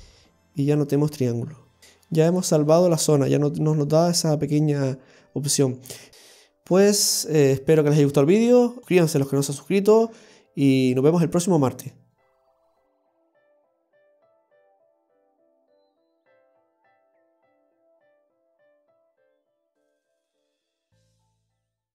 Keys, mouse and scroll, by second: 1.8 Tab, 1.8 scroll up 1, 6.6-8.8 scroll down 1.